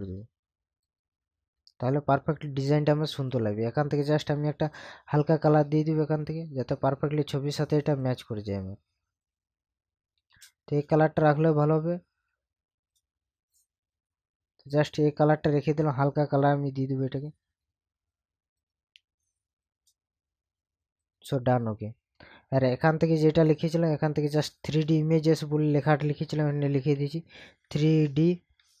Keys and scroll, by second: 26.9 3.